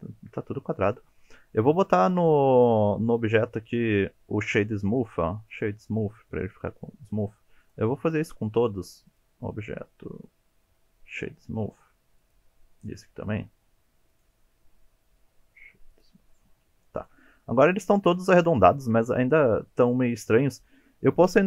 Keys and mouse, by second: 2.6 click, 6.8 shift+middle drag, 7.7 click, 9.1-12.3 drag, 14.2-16.0 drag, 17.4 shift+middle drag, 18.7 shift+middle drag, 21.3-21.4 drag.